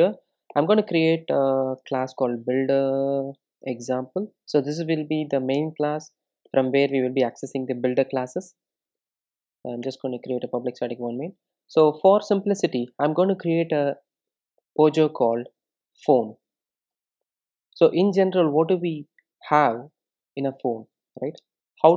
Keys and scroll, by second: 9.9 Return, 14.3 super+n.